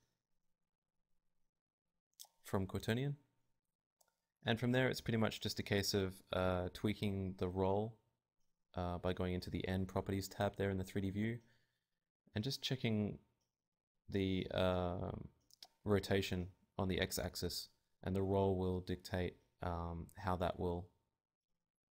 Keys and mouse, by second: 0.1 Tab, 2.0 click, 2.0 shift+s, 2.8 r, 5.8 Tab, 6.8 Tab, 7.1 Tab, 9.1 Tab, 9.4 Tab, 10.3 Tab, 10.9 Tab, 11.6 Tab, 11.9 Tab, 12.2 Tab, 12.9 Tab, 13.6 Tab, 14.3 Tab, 14.7 Tab, 15.2 Tab, 15.2 click, 15.8 Tab, 16.7 click, 17.1 Tab, 17.6 middle click, 18.5-21.9 drag.